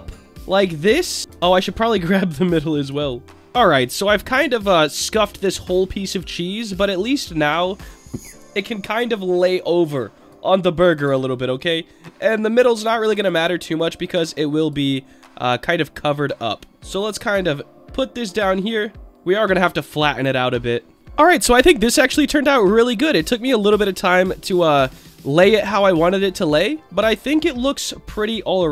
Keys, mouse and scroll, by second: 1.3 ctrl+z, 1.6 middle click, 3.3 Tab, 3.3 middle click, 3.3 click, 4.0-4.9 scroll up 2, 5.1-5.4 middle drag, 6.1-7.9 drag, 9.1-10.3 drag, 11.0 s, 11.5 click, 12.7 right click, 14.6 click, 15.4 click, 15.9-16.7 middle drag, 16.9-19.0 drag, 19.0 Tab, 20.2 click, 21.0 Tab, 21.0 middle click, 22.4-23.3 middle drag, 23.9-24.3 scroll down 1, 24.3-27.3 middle drag, 27.3-27.7 scroll up 1, 27.7 click, 28.1-28.7 scroll down 2.